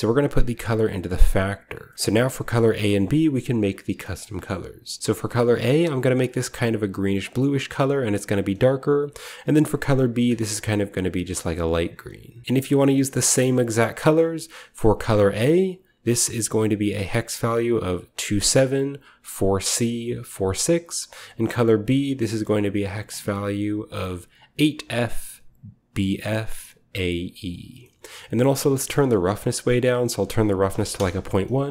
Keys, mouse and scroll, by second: 1.7-5.0 middle drag, 1.9-3.0 scroll down 1, 5.3-5.7 scroll down 1, 5.7 click, 6.6-7.5 scroll down 1, 7.5-8.7 scroll up 1, 8.7 click, 9.7 click, 10.3-12.4 scroll up 2, 10.6 click, 12.4 v, 13.2 ctrl+middle click, 13.2-14.0 ctrl+scroll down 1, 14.0-14.8 scroll down 1, 14.8 click, 16.1 click, 16.9 drag, 21.7 click, 22.6 click, 27.9-28.8 middle drag, 29.0-31.3 middle drag, 29.9-31.3 drag, 30.7 typing, 30.8 Return.